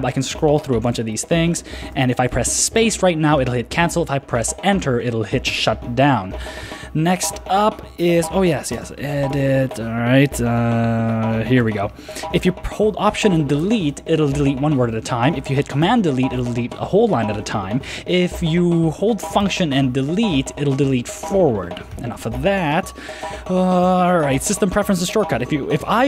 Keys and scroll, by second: 1.1 shift+Tab, 8.2 super+w, 8.7 super+space, 9.3 Return, 10.5 super+n, 11.6 super+v, 14.1 alt+BackSpace, 14.2 alt+BackSpace, 14.4 alt+BackSpace, 14.6 alt+BackSpace, 14.7 alt+BackSpace, 14.9 alt+BackSpace, 15.8 super+BackSpace, 22.1 super+BackSpace.